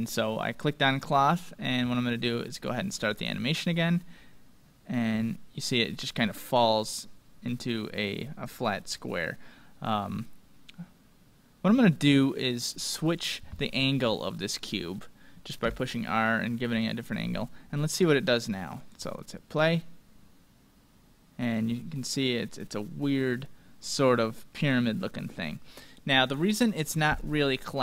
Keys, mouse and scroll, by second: 2.4-4.8 drag, 3.6 middle click, 4.0 scroll down 1, 4.2 middle click, 4.6-5.7 scroll down 1, 5.7-7.4 middle drag, 8.8-9.3 scroll up 1, 9.3-11.2 middle drag, 12.5-14.8 drag, 13.7-16.1 middle drag, 15.6 r, 17.9-20.5 drag, 19.6-21.8 middle drag, 22.0-23.8 middle drag, 26.3-27.8 drag, 27.7-27.8 scroll down 1.